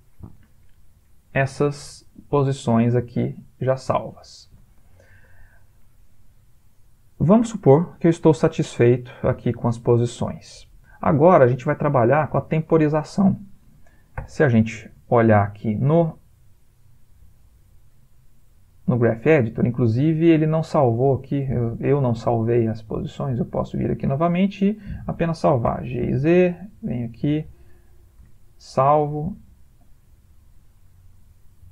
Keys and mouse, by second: 4.3 Escape, 6.9 click, 14.2 a, 15.2-15.6 ctrl+middle click, 16.0 middle click, 17.4 ctrl+middle click, 20.3 click, 25.8 g, 28.2 i, 29.8 click.